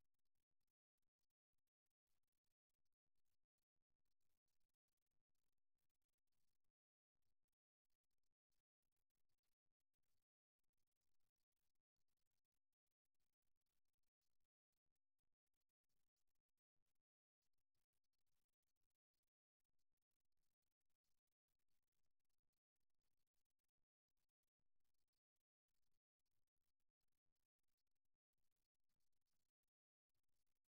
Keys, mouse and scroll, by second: 1.0-3.2 middle drag, 8.4-10.6 middle drag, 10.6-12.6 right drag, 19.0-21.0 right drag, 21.6-26.6 middle drag.